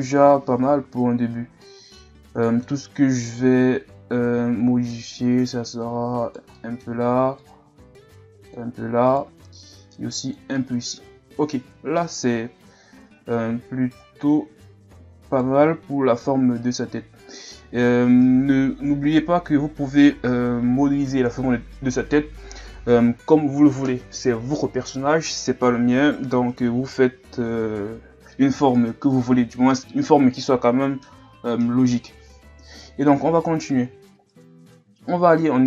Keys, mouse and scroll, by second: 0.1 KP_3, 1.6-2.1 middle drag, 2.1 scroll up 1, 2.4-4.3 middle drag, 4.3 Tab, 5.1 right click, 6.6 middle click, 7.4-9.1 drag, 9.1 right click, 9.6 click, 10.6 middle click, 11.0 Tab, 11.6 KP_1, 12.9 scroll down 1, 13.2 scroll up 2, 13.5 Tab, 14.0 right click, 15.7 Tab, 16.3-16.8 scroll down 3, 16.8-17.7 scroll up 3, 17.7-18.5 scroll down 1, 34.1-34.8 scroll up 4, 35.1 Tab.